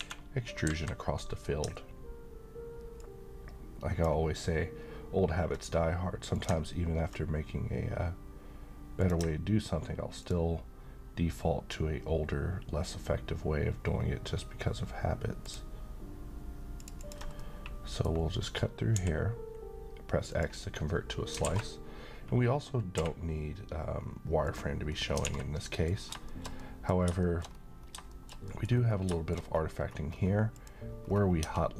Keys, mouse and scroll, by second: 3.3-4.3 ctrl+drag, 9.0 click, 15.4 ctrl+click, 17.3 middle click, 17.5-18.4 middle drag, 18.9 x, 20.3 click, 21.5 alt+a, 22.9 q, 24.4 click, 25.0 middle click, 25.2 a, 25.6 middle click, 26.0 scroll down 1, 26.3 shift+middle click, 27.4 scroll up 1, 28.1 shift+middle click, 28.7-29.0 scroll up 1, 29.1 middle click, 29.4-30.1 scroll up 1, 30.6 click, 31.1-31.4 scroll down 1, 31.4 Tab.